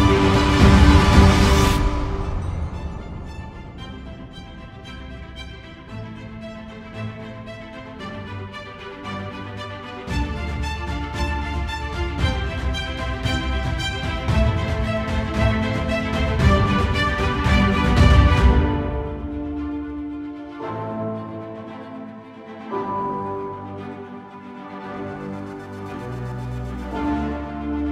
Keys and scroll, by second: 0.7 ctrl+t.